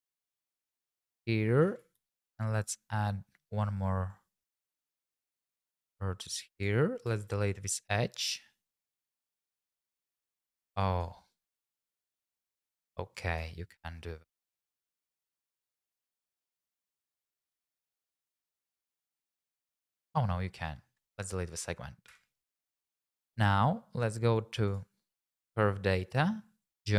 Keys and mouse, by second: 1.9 ctrl+r, 4.1 click, 4.8 g, 5.0 x, 5.1 x, 6.5 click, 7.1 Tab, 8.3 Tab, 9.7 Tab, 10.2 Tab, 10.8 click, 11.3 click, 13.1 click, 14.4 Tab, 15.2 Tab, 15.9 click, 17.8 click, 18.4 x, 22.1 Tab, 26.6 click.